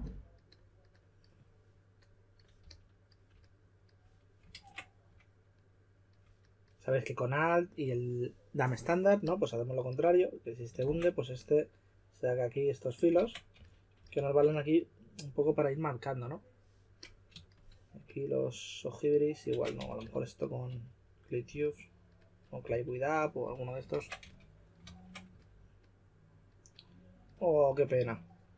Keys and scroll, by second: 2.6 typing, 4.5 super+z, 10.8 super+z, 13.1 super+z, 13.5-14.1 typing, 19.5 super+z, 19.5-20.6 typing, 22.6 s, 23.9 super+z, 24.2 s, 27.9 4.